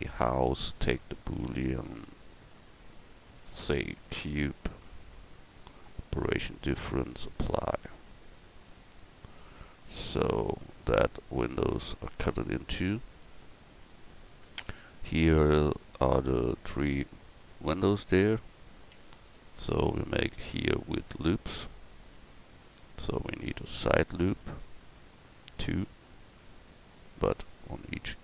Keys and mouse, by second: 0.8-3.0 middle drag, 8.2-10.1 middle drag, 11.4 middle click, 17.8 Tab, 18.5 Tab, 18.9 Tab, 23.7 ctrl+r.